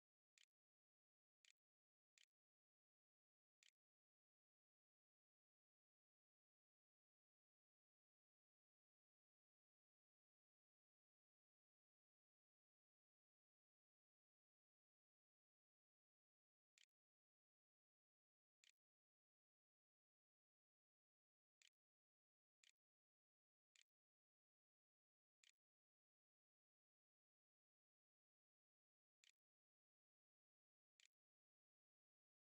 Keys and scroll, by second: 0.5-5.4 typing, 7.0 7, 15.8-19.0 typing, 20.1-25.7 typing, 26.8-29.0 typing, 30.2 ', 30.8 Return.